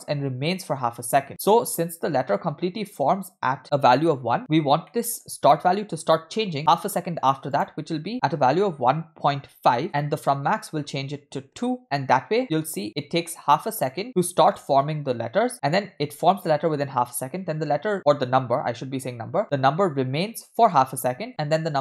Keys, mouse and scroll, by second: 1.2 middle click, 4.9 middle click, 7.6-9.8 drag, 10.6-11.6 drag, 12.4 click, 12.8 space, 13.0 space, 14.0 space, 14.5 space, 14.5 click, 15.1 space, 15.9 space, 21.3-21.8 typing.